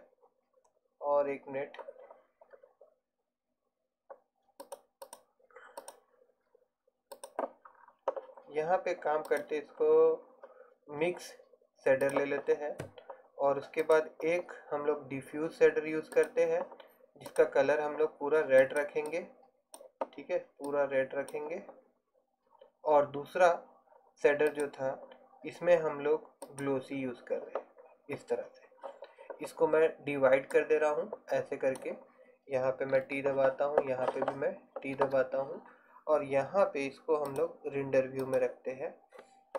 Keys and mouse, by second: 9.0 middle click, 9.4-11.3 drag, 13.9-26.5 drag, 30.6-33.1 drag, 33.1 t, 35.0 t, 37.4 click.